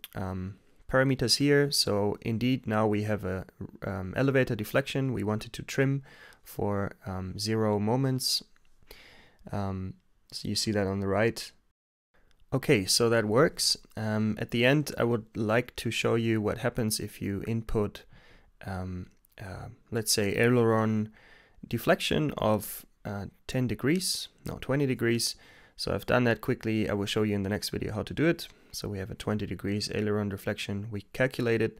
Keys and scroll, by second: 13.7 Return, 14.1-15.6 typing, 16.3 Return, 21.0-24.3 typing, 28.8 x, 30.1 Return.